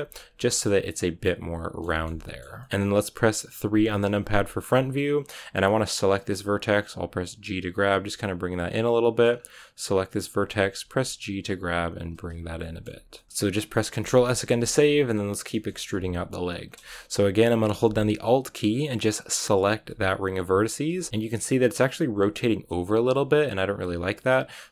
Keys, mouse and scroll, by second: 0.2 scroll down 5, 0.4-2.6 middle drag, 2.6 scroll up 6, 3.6 KP_3, 4.3 shift+middle click, 4.5 scroll down 2, 6.0 right click, 6.7 g, 8.6 shift+middle click, 9.2-9.9 scroll up 2, 9.9 right click, 10.1-10.6 scroll down 1, 10.6 g, 12.1-12.5 scroll down 3, 12.5-16.5 shift+middle drag, 16.5 scroll up 1, 16.8 shift+middle click, 17.6-18.9 scroll up 1, 18.9-19.3 scroll up 1, 19.3-20.5 alt+right drag, 20.5-20.8 scroll down 2, 20.8-22.9 shift+middle drag, 22.9-24.7 scroll up 1.